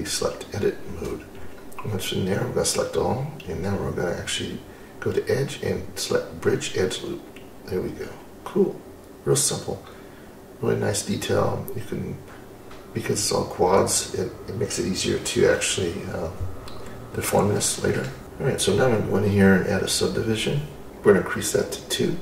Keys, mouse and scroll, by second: 2.9-3.7 drag, 5.4-7.0 drag, 7.9-13.4 middle drag, 13.5 scroll up 1, 13.8-14.4 scroll down 2, 14.4-15.6 middle drag, 15.7 scroll up 1, 15.9-16.6 scroll down 3, 16.6-18.2 middle drag, 18.2 click.